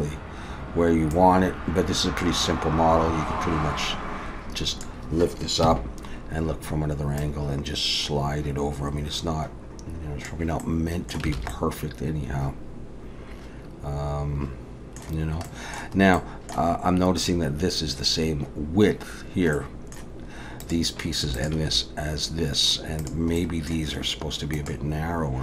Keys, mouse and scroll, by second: 1.1 click, 5.7 KP_1, 7.2 click, 10.6 middle click, 11.3 alt+a, 11.5 middle click, 15.2-15.7 scroll down 2, 15.5 middle click, 16.0 scroll up 3, 16.2 middle click, 19.5 middle click, 20.6 click, 21.3 shift+click, 23.0 click, 23.4 middle click.